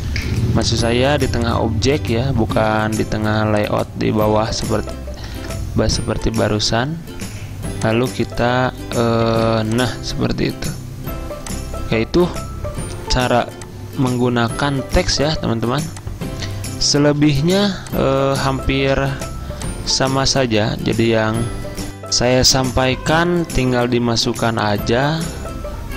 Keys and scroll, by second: 5.4 ctrl+z, 14.8 z, 17.2 v, 18.9 alt+2, 21.0 2.